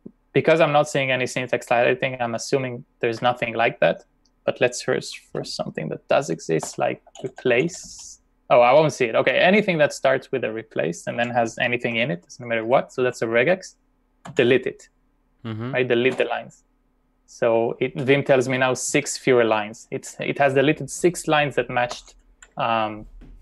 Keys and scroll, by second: 2.7 BackSpace, 6.7-8.0 typing, 11.2 ., 11.9 *, 13.0 /, 14.3 d, 16.1 Return, 22.0 u.